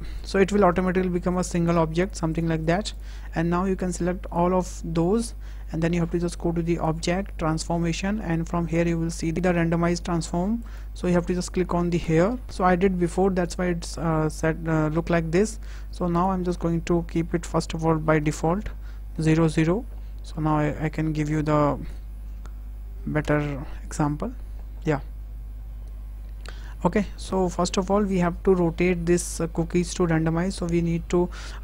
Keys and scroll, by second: 18.0 KP_0, 19.3 Tab, 21.7 KP_0, 23.1 Return.